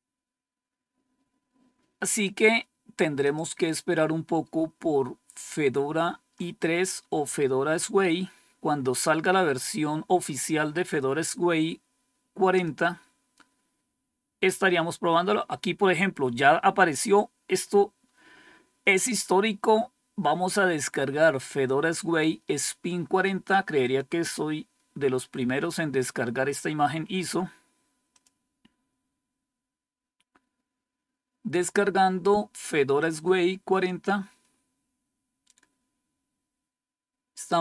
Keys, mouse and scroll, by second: 3.1 click, 4.4-5.5 scroll down 4, 6.2-10.1 scroll down 6, 12.4 click, 23.7 click, 26.4 scroll down 2, 28.0 click, 32.9 click, 33.2 click.